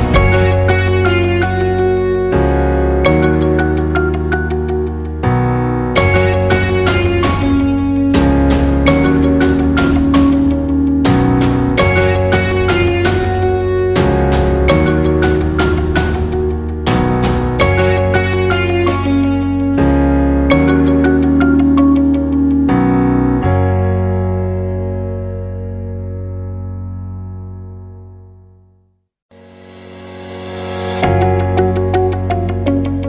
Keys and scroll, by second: 2.0 ctrl+t, 14.2 Up, 14.3 Up, 14.5 Down, 14.9 Down, 15.2 Left, 15.6 Up.